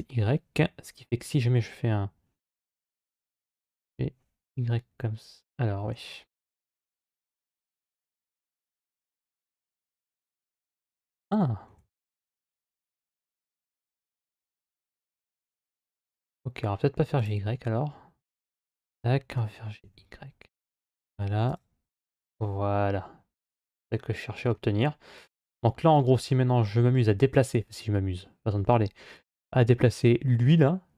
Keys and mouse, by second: 2.8 g, 6.7 a, 8.0 g, 14.9 ctrl+z, 15.3 ctrl+z, 17.0 click, 18.4 a, 19.1 g, 24.4-27.6 middle drag.